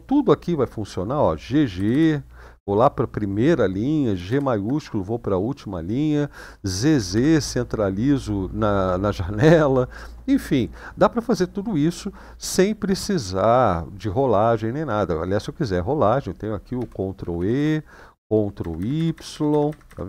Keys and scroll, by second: 0.5 Down, 1.5 g, 1.7 g, 4.0 shift+g, 6.7 z, 6.9 z, 16.5 ctrl+e, 16.9 ctrl+e, 17.3 ctrl+e, 18.3 ctrl+y, 18.5 ctrl+y, 18.9 ctrl+y, 19.1 ctrl+y, 19.4 ctrl+y, 19.6 ctrl+y, 19.8 ctrl+y, 20.0 ctrl+y.